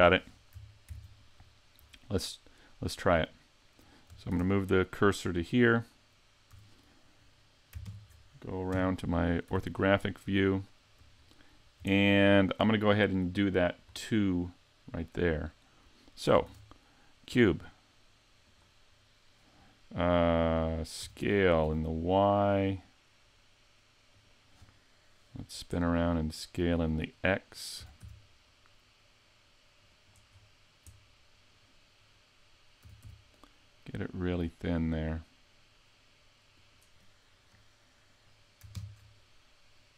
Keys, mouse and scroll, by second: 0.9 ctrl+Up, 1.8-2.5 scroll up 3, 2.5 middle click, 3.3 right click, 4.3 shift+s, 6.5 a, 7.9 ctrl+KP_3, 8.7 KP_5, 9.5 z, 9.8 scroll up 3, 10.1 shift+middle click, 11.2 scroll up 1, 11.5-11.9 scroll down 3, 11.9 shift+middle click, 13.6-14.3 scroll down 3, 14.3 middle click, 16.4 shift+a, 21.0 s, 24.3 click, 25.8 middle click, 27.0 middle click, 30.1 click, 30.1 s, 30.3-30.9 scroll up 3, 30.9 middle click, 30.9 scroll up 1, 32.8 s, 38.7 ctrl+KP_3.